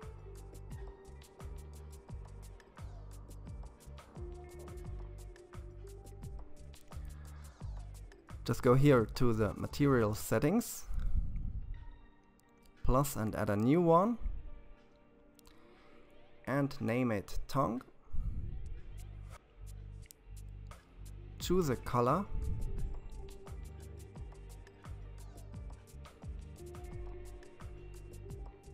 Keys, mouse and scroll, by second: 0.3-3.4 middle drag, 7.1-7.6 scroll down 7, 9.0 click, 11.1-12.8 drag, 13.8-17.1 drag, 24.3 click, 28.2 click.